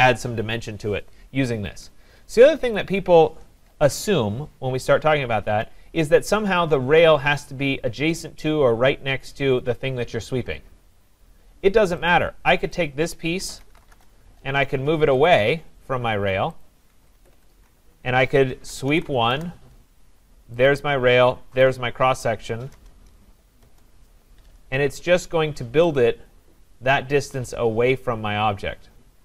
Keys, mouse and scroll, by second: 1.2 middle click, 1.3 middle click, 1.4 middle click, 1.5 scroll, 2.0 scroll, 2.7 click, 3.7 Delete, 4.3 scroll, 6.1 scroll, 6.2 click, 12.1 click, 12.7 click, 13.4-14.4 typing, 15.3 click, 16.6 click, 17.0 Escape, 17.2 Escape, 17.4 Escape, 18.3-19.4 typing, 20.7 click, 21.6 click, 22.7 Return, 23.6 Return, 25.0 scroll down 4.